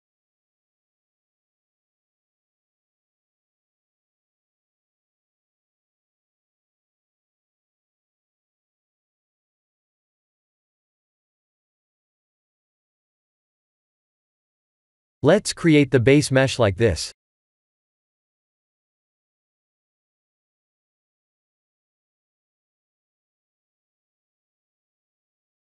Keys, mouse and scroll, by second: 2.3 r, 4.8 g, 6.7 r, 9.1 middle click, 13.2 KP_1, 14.6 click, 15.7 shift+a, 21.0 ctrl+3, 21.7 s, 23.0 g.